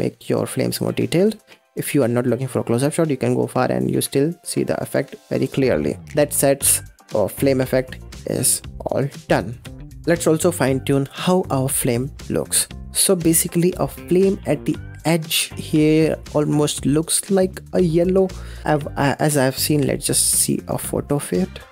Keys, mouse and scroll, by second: 1.1 ctrl+z, 1.8 ctrl+z, 2.3-2.8 scroll down 8, 3.1 space, 5.8-6.2 scroll up 6, 6.2-7.1 middle drag, 7.1 space, 9.5 space, 9.9 scroll up 5, 10.0 scroll down 3, 10.3 middle click, 12.0-12.4 middle drag, 12.4-12.7 scroll up 6, 12.7-15.5 middle drag.